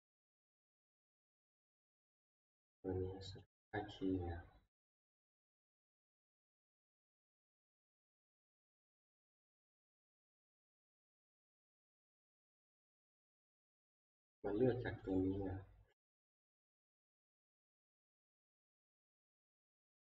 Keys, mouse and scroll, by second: 0.0 click, 3.3-8.5 drag, 9.6 click, 9.6 ctrl+scroll, 12.8 click, 14.2 click, 15.1 click.